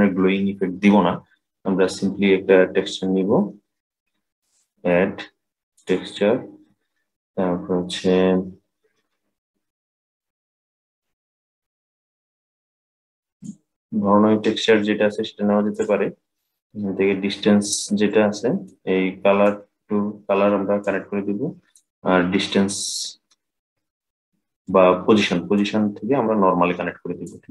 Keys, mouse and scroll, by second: 4.1-7.2 drag, 17.8-19.1 middle drag, 19.1-24.5 drag, 25.3-27.5 drag.